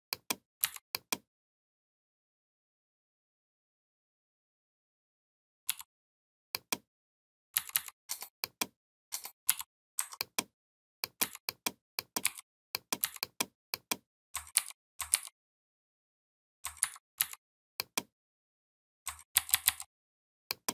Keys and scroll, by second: 0.4 v, 5.5 m, 7.4 v, 9.3 shift+m, 11.0 v, 14.4 ctrl+g, 14.9 ctrl+g, 16.6 ctrl+c, 19.1 ctrl+[.